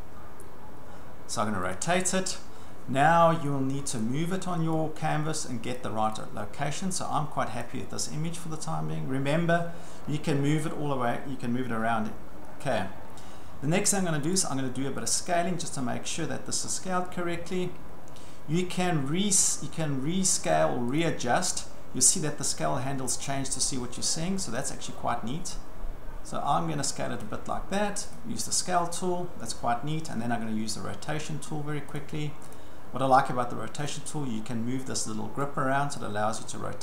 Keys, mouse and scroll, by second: 1.8 click, 4.0 click, 5.8 click, 7.6 click, 14.3 click, 15.1 click, 16.7 ctrl+scroll, 17.4-18.5 ctrl+scroll, 18.5 ctrl+scroll, 21.0 click, 21.7 ctrl+scroll, 22.8 ctrl+scroll, 23.5-23.8 ctrl+scroll, 27.2 click, 28.2 click, 32.0 click, 32.5 click, 35.4 click.